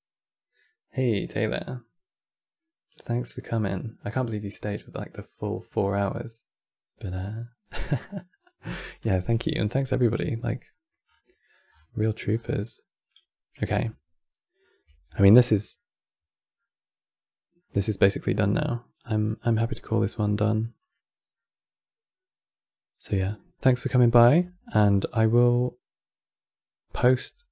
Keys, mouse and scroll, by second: 10.8-11.8 scroll down 13, 12.2 scroll down 5, 12.8-24.1 middle drag, 24.5-27.5 ctrl+middle drag.